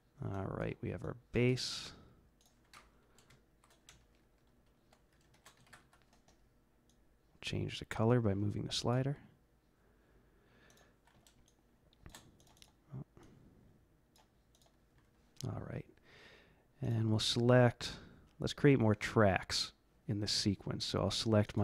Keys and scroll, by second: 0.2 typing, 3.2 ctrl+shift+Left, 3.8-6.3 typing.